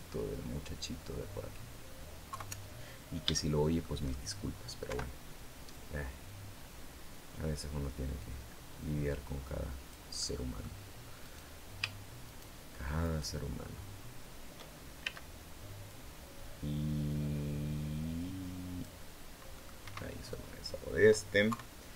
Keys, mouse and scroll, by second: 0.7-2.1 scroll down 1, 2.1 KP_3, 2.7-3.1 scroll down 2, 3.1 shift+middle click, 4.7 o, 5.5 click, 6.3-6.6 scroll up 1, 7.2-7.8 scroll up 2, 8.1-8.7 scroll up 1, 10.0 click, 11.0 right click, 12.0 shift+right click, 12.8 shift+right click, 14.8 shift+c, 15.7-18.8 drag, 19.3 middle click, 19.6 Escape, 20.1 middle click, 21.3 KP_3.